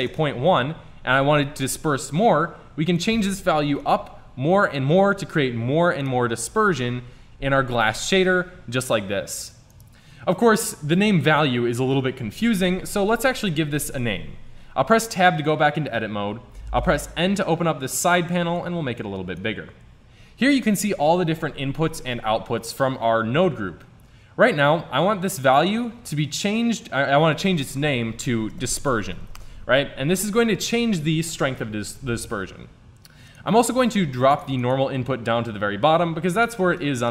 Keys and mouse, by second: 3.0-5.0 drag, 6.0-8.1 drag, 9.7 click, 13.4 middle click, 14.0 Tab, 16.8 n, 20.1 click, 24.5-26.5 drag, 27.7-29.4 drag, 33.3-36.5 drag, 36.5-37.1 middle drag.